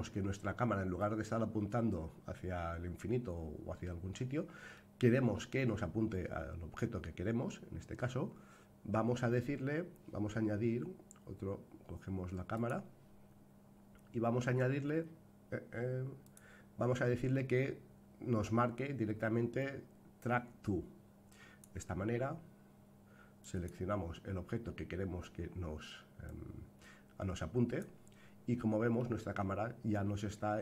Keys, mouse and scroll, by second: 12.5 click, 16.2-21.6 drag, 23.4-27.8 drag, 28.9-30.6 middle drag.